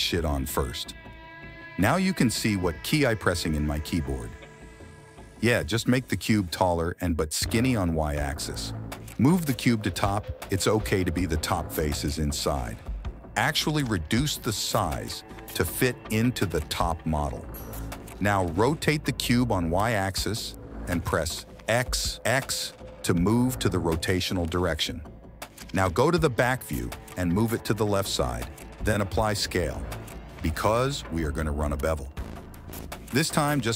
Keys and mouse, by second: 0.0 n, 0.8 s, 4.1 s, 7.7 KP_3, 8.8 g, 10.5 KP_1, 12.0 s, 14.7 g, 16.7 r, 21.7 g, 23.9 s, 24.8 g, 26.5 KP_3, 27.0 g, 31.6 ctrl+a, 33.2 ctrl+a.